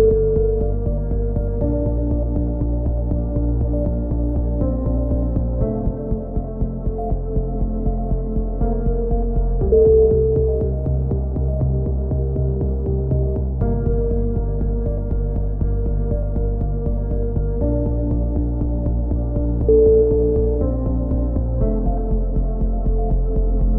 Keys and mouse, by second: 1.2 right click, 1.9 click, 3.3 a, 3.4-5.5 middle drag, 6.8 middle click, 7.8 right click, 8.1 click, 10.0 right click, 10.1-11.1 middle drag, 10.9 c, 11.6-12.6 right drag, 11.8-12.8 drag, 13.4 a, 13.6 z, 14.5 z, 17.3-18.4 middle drag, 18.6-19.8 middle drag, 20.0 right click, 20.9 middle click, 21.1 click, 23.6-23.7 right drag.